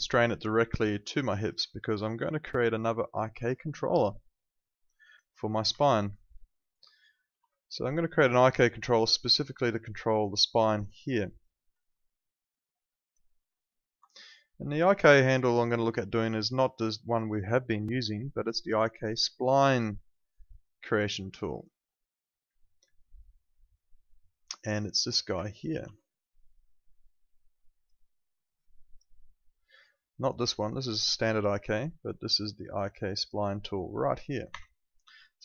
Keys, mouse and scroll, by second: 1.5 click, 2.3 alt+click, 2.6 alt+right click, 2.9 alt+click, 3.3 alt+middle click, 3.7 alt+click, 5.7 alt+click, 7.3 ctrl+2, 13.9 click, 17.3 click, 25.7 ctrl+2, 34.5 Escape.